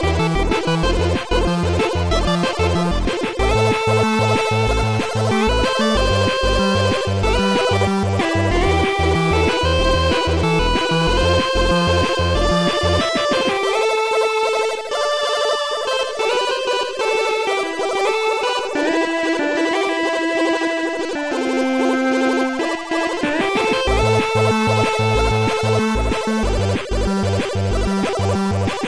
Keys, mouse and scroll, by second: 2.3 click, 4.9 click, 7.0 click, 11.6 click, 13.6 click, 17.9 click, 19.1 click, 23.3 click, 26.7 click, 27.1 click, 28.1 click.